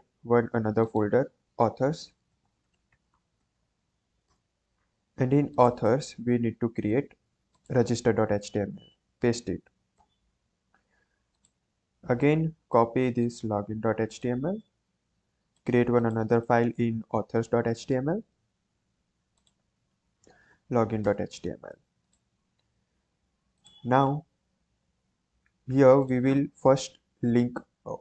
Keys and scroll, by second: 2.0-3.8 typing, 4.2 Return, 8.7 ctrl+v, 9.9 Return, 14.5 ctrl+c, 20.1 ctrl+v, 21.0 Return, 22.7 ctrl+s, 24.7 ctrl+s.